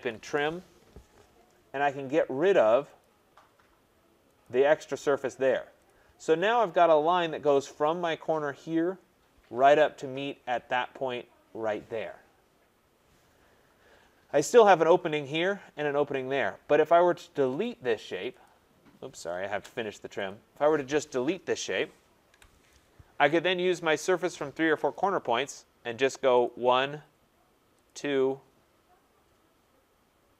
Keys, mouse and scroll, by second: 0.0-0.4 typing, 3.0 click, 4.4 click, 5.9 click, 6.4 scroll, 6.5 click, 7.2-8.0 scroll, 8.6-9.4 scroll, 9.6-10.4 scroll, 13.0 scroll, 13.9-14.9 scroll, 17.6 click, 18.5 click, 19.5 Return, 20.3 click, 22.3 Delete, 24.9 click, 26.4 click, 27.8 click, 28.1-28.5 scroll, 29.0 scroll.